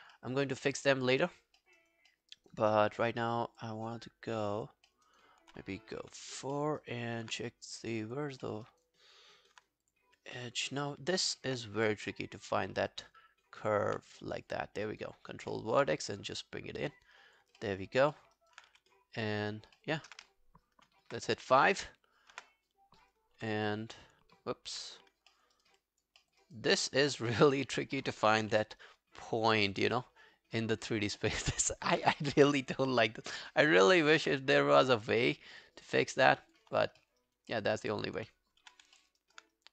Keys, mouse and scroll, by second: 0.2 alt+middle click, 0.4 alt+right click, 0.6 alt+middle click, 1.0 alt+scroll down 1, 1.2 alt+click, 1.6 alt+middle click, 1.8 alt+right click, 2.1 alt+middle click, 2.4 alt+right click, 2.7 alt+click, 3.2 alt+middle click, 3.6 alt+click, 4.9 alt+middle click, 5.1 alt+right click, 6.0 4, 6.6 alt+middle click, 6.8 alt+right click, 8.5 alt+middle click, 8.7 alt+right click, 10.4 alt+middle click, 10.7 alt+right click, 12.4 scroll down 1, 13.2 alt+right click, 14.3 right click, 15.2 scroll down 2, 15.5 alt+middle click, 17.6 alt+middle click, 18.4 alt+right click, 18.7 w, 19.5 scroll down 3, 19.8 alt+middle click, 21.1 alt+middle click, 21.1 space, 22.3 5, 24.7 5, 25.3 alt+middle click, 25.6 alt+right click, 25.8 alt+click, 26.2 alt+middle click, 26.4 alt+right click, 27.3 alt+middle click, 27.3 right click, 27.5 alt+right click, 28.6 4, 29.7 right click, 31.6 alt+middle click, 32.4 5, 33.0 alt+click, 33.5 alt+middle click, 33.7 alt+right click, 36.8 alt+scroll down 1, 37.0 alt+middle click, 37.2 alt+right click, 37.5 alt+middle click, 37.8 alt+right click, 38.6 w, 39.0 alt+middle click, 39.2 alt+right click, 39.6 right click.